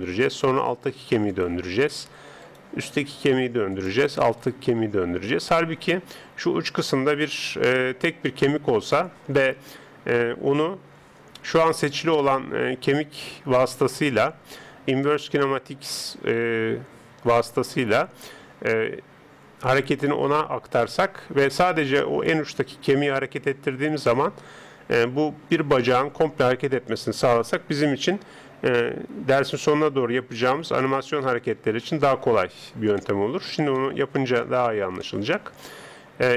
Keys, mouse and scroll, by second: 0.3 right click, 0.7 r, 2.4 right click, 3.1 r, 4.8 r, 29.5 right click, 31.3 alt+g, 31.6 alt+r, 33.0-36.3 middle drag.